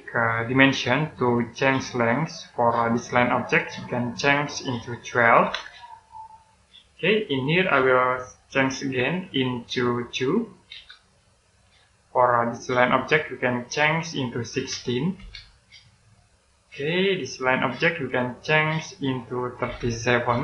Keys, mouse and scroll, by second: 5.2 typing, 6.0 click, 7.0-7.9 scroll up 1, 8.4 click, 9.2 click, 10.6 2, 11.3 click, 14.4-15.1 typing, 15.8 click, 16.4 scroll down 1, 17.4 click, 19.6-20.1 typing.